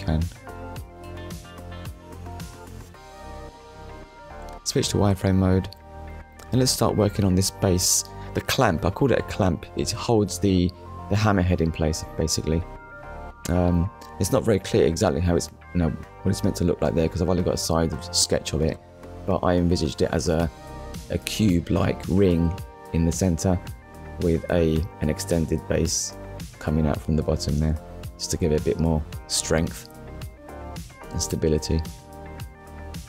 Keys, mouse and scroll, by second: 1.2 KP_1, 3.6 click, 4.4 shift+middle click, 10.1 scroll up 1, 14.6 middle click, 15.2-15.6 scroll down 1, 16.9 click, 19.6 click, 20.7 middle click, 21.3-21.7 scroll down 1, 22.3 click, 24.0 click, 25.4 shift+h, 25.7 e, 27.1 shift+b, 28.6 Return, 30.3 click.